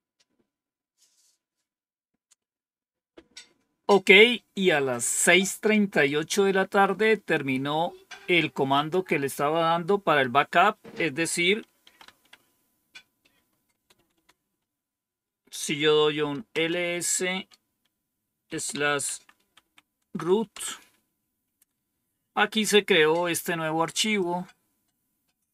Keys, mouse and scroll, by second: 8.6 click, 11.5-12.4 typing, 13.7-14.1 typing, 16.2-17.0 typing, 18.4-20.1 typing, 20.5 Return, 24.1-25.5 drag.